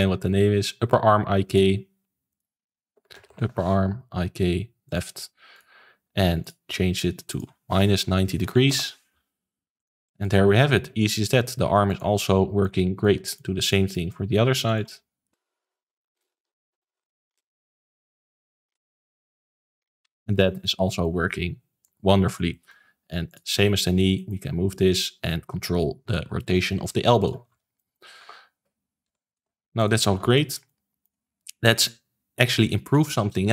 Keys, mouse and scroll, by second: 1.4 click, 2.3 click, 3.2 p, 5.5 click, 6.4 click, 7.3-9.9 drag, 10.0 middle click, 10.3 g, 12.2 ctrl+z, 12.6 middle click, 13.6 click, 13.9 middle click, 14.6-16.4 drag, 16.6 click, 17.0 click, 17.1 click, 17.9 click, 18.7 p, 19.4-20.6 drag, 20.8 middle click, 21.2 g, 22.5-23.2 middle drag, 23.2 click, 23.6 shift+middle click, 23.9 scroll up 2, 24.1 middle drag, 24.4 g, 27.4 ctrl+z, 27.7-28.1 middle drag, 28.1 a, 29.0 alt+r, 29.3 alt+g, 29.7 click, 30.1 ctrl+s, 30.3-31.1 shift+middle drag, 31.1-31.4 scroll down 4, 31.4-33.5 shift+middle drag.